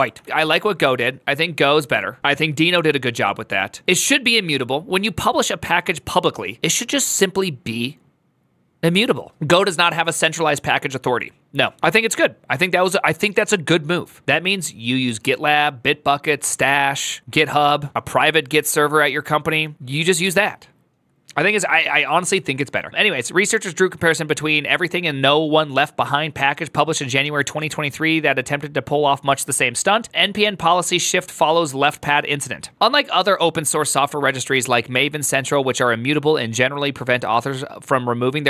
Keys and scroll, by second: 0.0 alt+f.